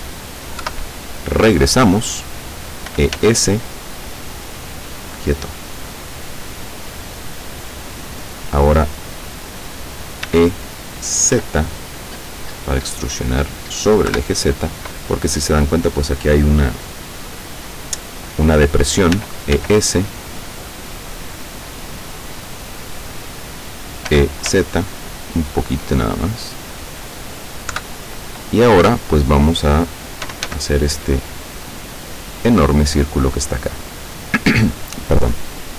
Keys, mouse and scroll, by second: 0.7 KP_7, 2.9 e, 3.2 s, 6.3 click, 7.1-8.7 middle drag, 8.7-10.3 scroll up 1, 10.3-10.9 scroll up 1, 10.3 e, 10.9-11.9 scroll up 1, 11.4 z, 11.9-13.3 scroll up 1, 13.3 click, 14.1 KP_7, 19.2 e, 19.6 s, 22.6 click, 22.9 middle click, 24.2 e, 24.6 z, 27.1 click, 27.8 KP_7, 30.0-31.0 typing, 34.1 click, 35.5-35.7 middle drag.